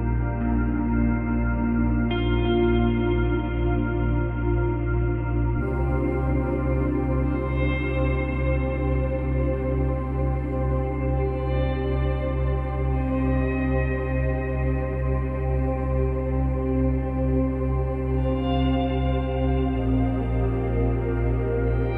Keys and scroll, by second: 19.6 space.